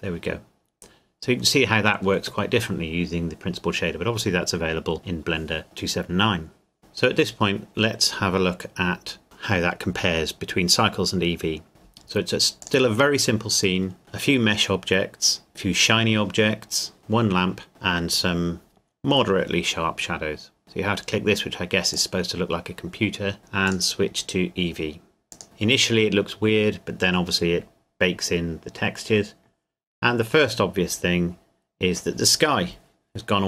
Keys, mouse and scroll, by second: 6.8 click, 12.6 click, 14.0-15.4 scroll down 1, 21.9 click, 23.6 click.